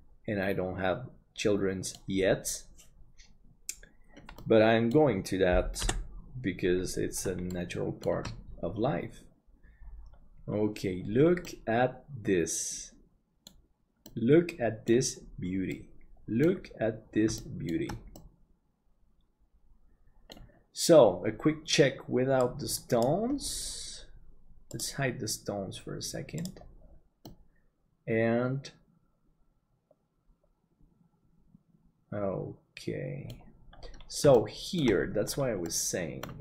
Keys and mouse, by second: 4.4 middle click, 5.8 KP_7, 7.5 shift+middle click, 11.4-13.5 middle drag, 14.0 middle click, 15.7 middle click, 17.4 shift+middle click, 18.2-20.3 middle drag, 27.2-33.3 middle drag, 34.3 shift+middle click, 35.7 middle click.